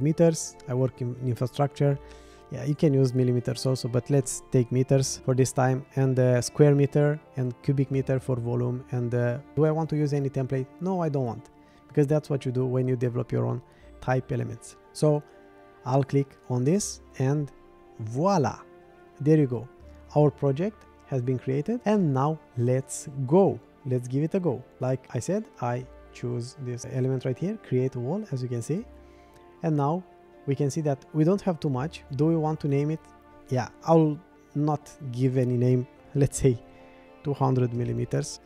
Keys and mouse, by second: 9.8-10.5 drag, 11.1 click, 32.1-36.8 drag, 38.3-38.4 drag.